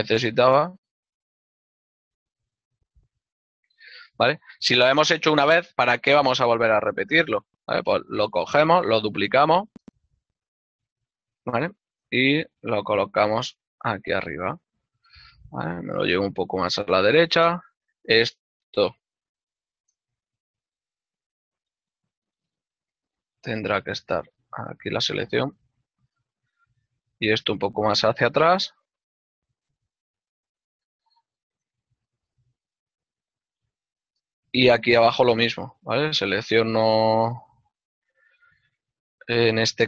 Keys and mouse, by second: 0.6 click, 1.2 g, 3.8 right click, 7.9 l, 9.8 ctrl+click, 10.1 shift+d, 10.7 z, 11.9 z, 12.4 click, 13.5 z, 13.7 ctrl+click, 15.1 ctrl+middle click, 16.3 x, 18.2 shift+click, 21.4 shift+middle click, 21.9 z, 22.8 click, 23.8 click, 27.9 y, 32.2 click, 32.4 middle click, 34.4 click.